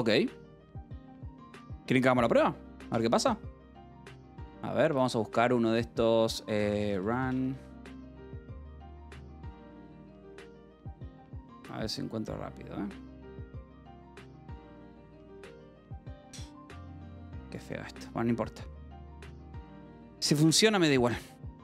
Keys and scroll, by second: 3.4 ctrl+t, 3.6-4.5 typing, 6.4-10.3 typing, 18.1 BackSpace.